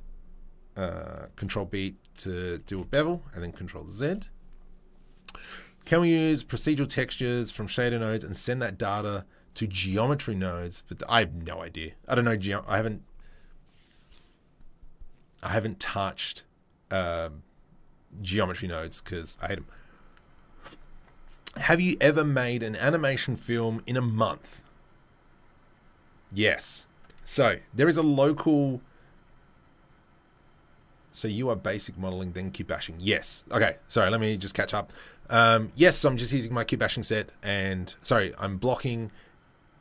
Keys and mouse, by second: 1.5 ctrl+b, 2.5 click, 2.6-39.8 middle drag, 2.6 g.